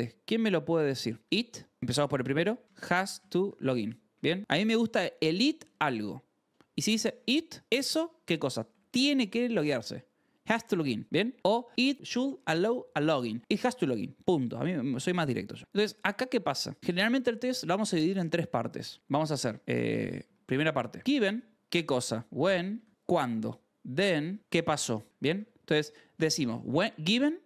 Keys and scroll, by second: 0.0-4.6 typing, 6.6 h, 6.9 l, 8.2-9.5 typing, 13.9-15.7 typing, 18.8-26.3 typing, 21.5 ctrl+s, 23.3 Escape, 24.4 Escape, 25.3 ctrl+s.